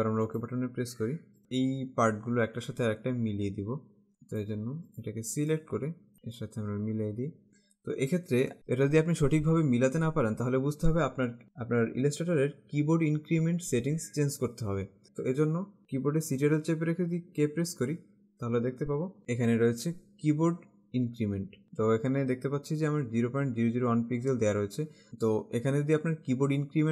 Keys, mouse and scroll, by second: 0.4 click, 3.7 alt+Caps_Lock, 4.1 click, 4.4 space, 4.9 click, 8.6 click, 16.9 ctrl+Caps_Lock, 17.5 ctrl+k.